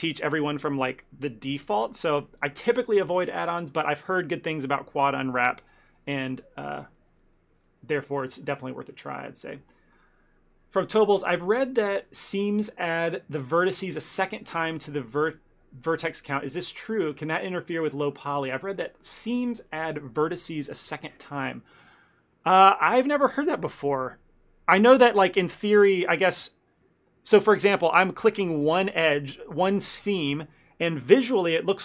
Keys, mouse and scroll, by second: 26.4 click, 28.8 click, 29.4 ctrl+middle click, 29.9 shift+middle click, 30.2 ctrl+middle click, 30.4 middle click.